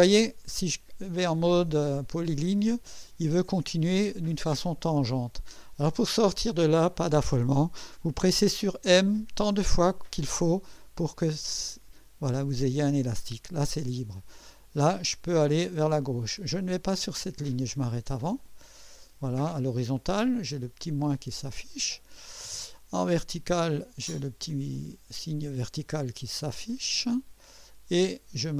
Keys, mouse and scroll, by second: 9.0 m, 10.3 m, 21.7 click, 27.2 click.